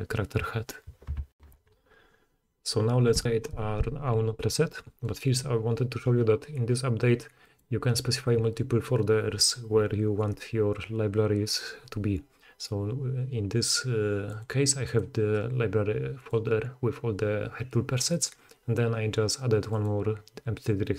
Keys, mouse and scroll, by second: 1.3 ctrl+shift+i, 4.3-15.0 drag, 15.0-16.2 middle drag, 16.2-18.3 drag, 18.3-19.9 middle drag, 19.9-20.9 drag.